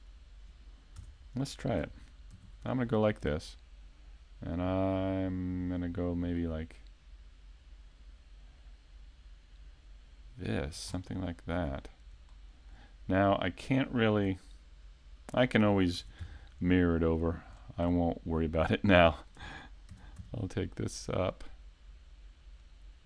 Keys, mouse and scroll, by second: 1.0 Tab, 2.3 ctrl+r, 10.7 click, 10.9 scroll down 3, 11.6-12.3 scroll down 1, 12.3 shift+middle click, 16.0 ctrl+Tab, 17.2 right click, 17.6-17.9 scroll down 1, 17.9 middle click, 18.9 shift+middle click, 21.4 right click, 22.6 click.